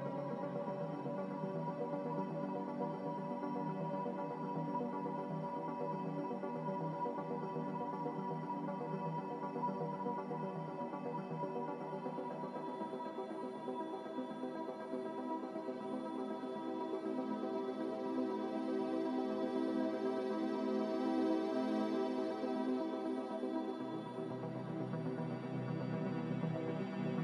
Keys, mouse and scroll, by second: 1.5 Delete, 2.3 Delete, 12.5 Delete, 13.6 Delete, 22.4 Escape.